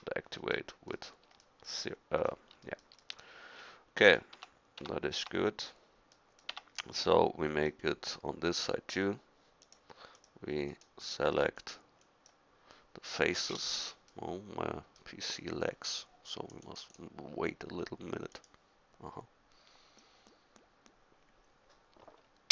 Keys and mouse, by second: 1.9 middle click, 4.4 Tab, 4.8 Tab, 5.2 Tab, 6.5 Tab.